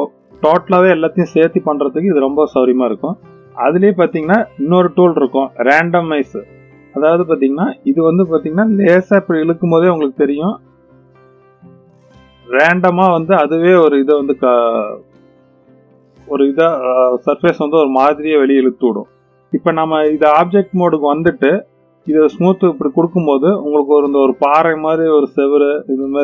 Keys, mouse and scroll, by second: 3.6-6.7 drag, 8.1-18.8 drag, 20.3-21.0 drag, 21.6 right click, 23.3-24.4 middle drag, 25.4-26.2 middle drag.